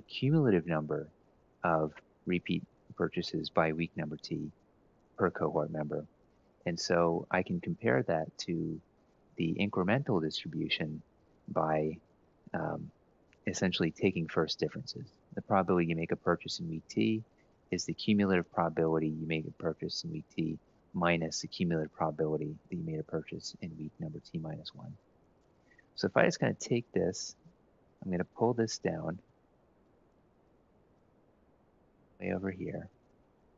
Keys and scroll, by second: 1.4 Escape, 5.8 Down, 6.8 F2, 23.6 Escape, 24.8 Up, 25.3 Up, 26.4 shift+Down, 28.9 ctrl+shift+Right, 29.7 ctrl+x, 30.3 Left, 30.8 Right, 32.2 ctrl+Down, 32.5 ctrl+Down, 32.8 ctrl+Down.